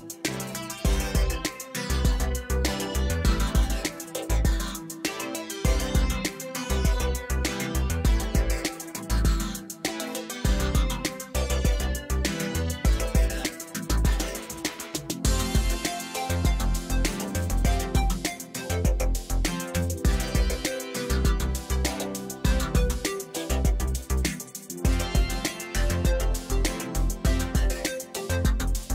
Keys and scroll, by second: 0.9 e, 2.9 Escape, 6.7 2, 8.3 1, 8.8 shift+z, 9.8 2, 10.5 s, 13.8 e, 15.4 Tab, 18.3 Tab, 19.2 Return, 19.7 1, 19.9 shift+z, 20.4 x, 20.9 shift+z, 21.5 Tab.